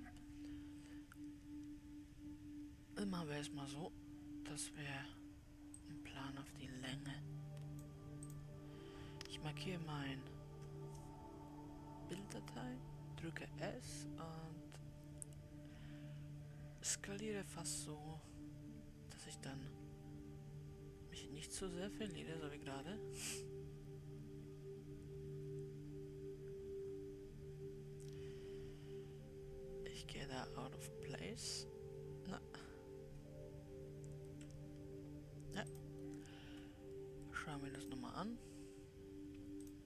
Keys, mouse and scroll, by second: 3.5-4.3 scroll down 2, 4.3-6.2 scroll down 1, 6.4 click, 9.7 click, 10.3-11.5 scroll down 3, 12.9 s, 38.8-39.8 drag.